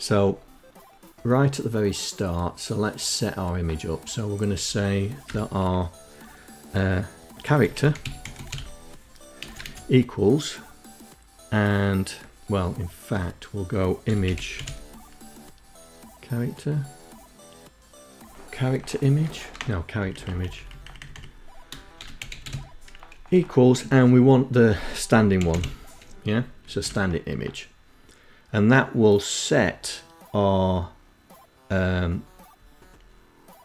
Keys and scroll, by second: 3.9 Return, 5.8-8.3 typing, 11.8 Home, 12.5-13.8 typing, 17.4 BackSpace, 17.8 BackSpace, 18.0 BackSpace, 18.2 BackSpace, 18.6 Right, 19.3 Right, 19.5 Down, 19.8 Down, 20.6-21.6 typing, 23.8-24.7 typing.